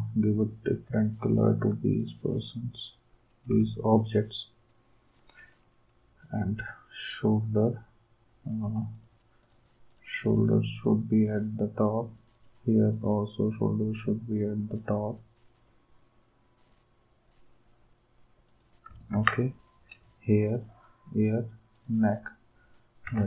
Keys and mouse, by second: 3.6 shift+click, 19.1 ctrl+s.